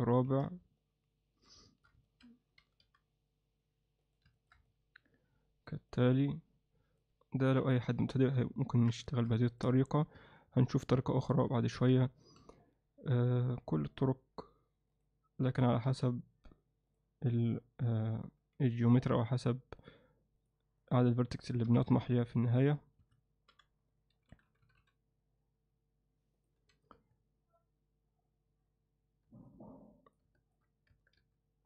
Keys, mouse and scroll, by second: 0.8-1.5 alt+middle drag, 1.7 shift+middle click, 2.1 ctrl+middle click, 2.6 g, 4.4 middle click, 4.7-7.1 middle drag, 7.5 KP_1, 8.0 z, 8.6 ctrl+alt+middle click, 9.5 ctrl+middle click, 10.2 Tab, 11.8 z, 12.4 z, 15.9 g, 18.4 g, 20.4-21.4 drag, 23.5 g, 26.6 z, 27.0 Tab, 29.5-30.2 alt+middle drag, 30.4 shift+middle drag.